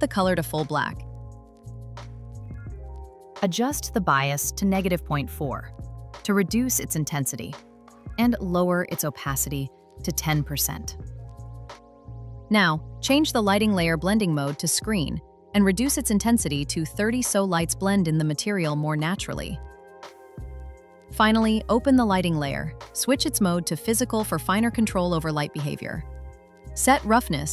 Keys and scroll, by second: 6.8 Return, 9.9 Return, 17.1 Return.